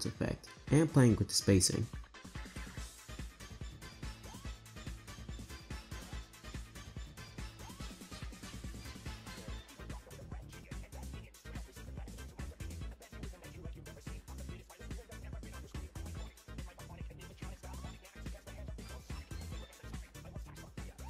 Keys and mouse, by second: 0.4 Right, 0.5 Right, 0.7 Right, 0.8 Right, 1.5 r, 2.6 click, 3.0 space, 3.5 space, 4.1 shift+middle drag, 4.6 click, 4.7-6.4 typing, 5.3 click, 6.0 click, 7.1 drag, 7.6 click, 7.7-13.6 typing, 9.6 click, 11.1 click, 12.1 click, 14.1 click, 14.9 Right, 15.1 r, 16.1 r, 16.7 r, 17.1 r, 18.0 click, 18.2 shift+d, 19.1 click, 19.5 click, 19.6 space, 20.5 space.